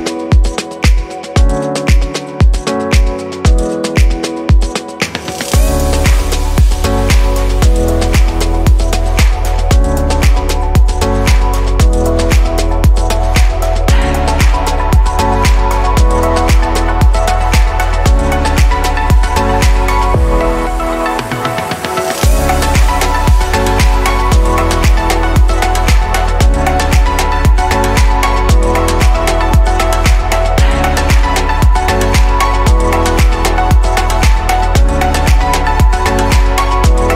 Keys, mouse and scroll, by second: 0.7 scroll up 3, 2.3 alt+shift+click, 3.6-4.6 middle drag, 4.6 click, 5.5 click, 6.9 alt+shift+click, 8.2 alt+shift+click, 8.9-10.5 middle drag, 10.5 scroll down 1, 11.4 e, 15.5-16.6 middle drag, 16.6 f, 18.5-19.1 drag, 19.4-22.4 middle drag, 25.7-27.0 scroll down 3, 27.0-28.4 scroll down 2, 28.4 click, 29.4 click.